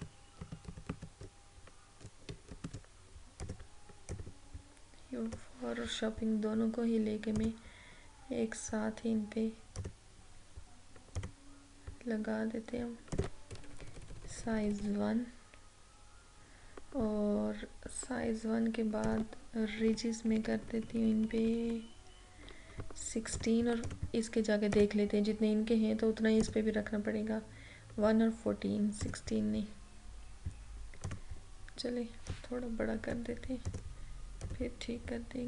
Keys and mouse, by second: 3.5-7.4 drag, 9.8 click, 13.6 Down, 19.1 click, 19.7 Up, 23.4 click, 29.1-35.4 drag.